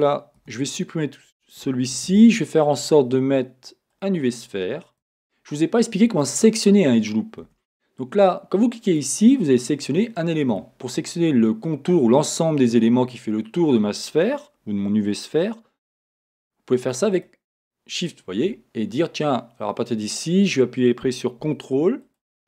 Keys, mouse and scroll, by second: 0.4 x, 2.1 shift+a, 5.1 Tab, 5.6 middle click, 7.5 a, 8.9 click, 10.1 middle click, 17.1 shift+click, 18.0 shift+click, 19.0 middle click, 20.4-22.0 middle drag, 22.0 ctrl+click.